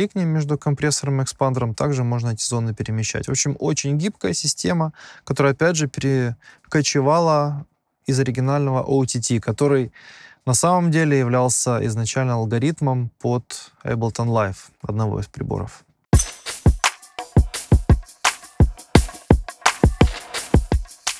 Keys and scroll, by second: 16.1 space.